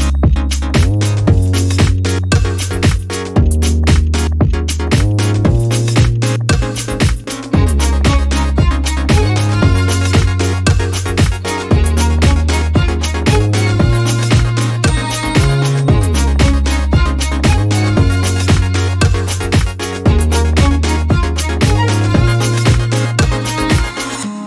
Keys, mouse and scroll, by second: 1.0 shift+click, 2.9 shift+click, 4.4 click, 5.3 shift+click, 6.2 shift+click, 8.6 shift+click, 10.1 shift+click, 11.9 click, 13.0 click, 14.1 shift+Up, 15.3 shift+click, 17.0-19.1 shift+drag, 20.3 click, 21.8 ctrl+y, 22.7 shift+click, 24.0 shift+click.